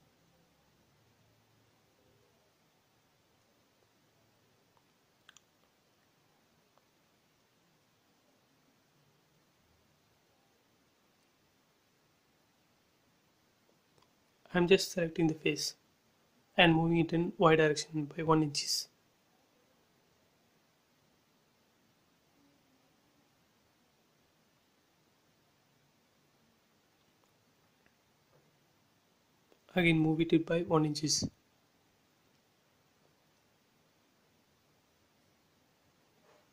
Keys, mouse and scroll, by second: 0.0 scroll up 1, 0.3 shift+middle click, 1.3 scroll up 1, 1.9 click, 2.4 scroll down 1, 3.3 middle click, 3.9 scroll up 1, 4.9 shift+x, 5.3 middle click, 5.4-11.7 middle drag, 11.7 scroll up 1, 12.6 scroll down 1, 13.3 click, 13.7 scroll up 1, 14.5 shift+click, 16.6-17.1 scroll down 2, 18.1 middle click, 18.8 scroll up 1, 19.0 shift+middle click, 19.8 shift+x, 20.2-22.1 scroll up 2, 22.1 m, 22.7-24.0 drag, 24.0 Left, 25.1 scroll down 1, 26.1 scroll up 1, 27.6 click, 29.6 Left, 30.4 1, 31.0 shift+', 31.1 Return, 31.4 space, 31.5-32.1 scroll down 2, 32.7-34.6 middle drag, 34.6 scroll up 1, 36.2 middle click.